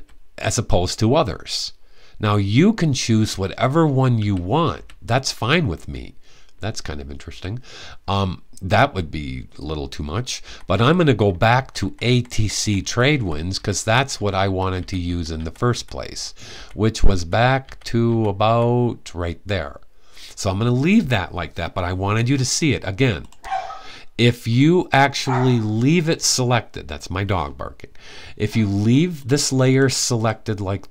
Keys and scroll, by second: 0.0-0.5 typing, 3.0 Down, 3.9-4.4 typing, 7.0 Down, 10.1 Up, 10.4 Up, 10.8 Up, 11.1 Up, 11.3 Up, 11.6 Up, 11.8 Up, 12.0 Up, 12.3 Up, 12.6-16.3 typing.